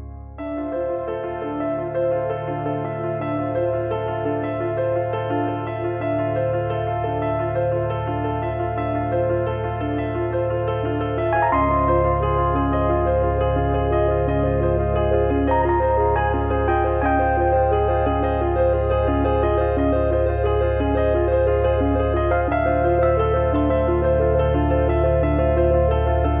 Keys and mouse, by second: 0.9 click, 2.2 click, 5.0 middle click, 6.2 middle click, 7.1 KP_1, 7.9 middle click, 8.4 KP_7, 9.1 middle click, 9.4 shift+middle click, 9.9 click, 12.3 click, 12.5 click, 13.6 click, 14.6 click, 15.4 click, 17.3 click, 18.8 click, 20.0 click, 20.4 click, 22.2 click, 22.9 click, 24.1 click, 25.4 click, 26.2 click.